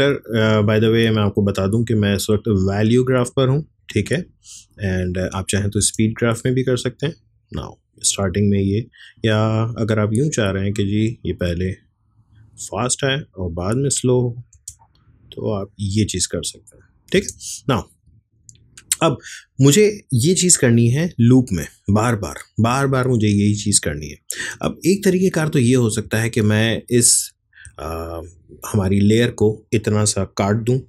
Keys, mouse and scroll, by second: 1.4 click, 4.0-5.8 drag, 5.8 space, 8.1-14.6 drag, 14.6 space, 17.2 space, 17.7-20.5 drag, 25.4-29.9 drag.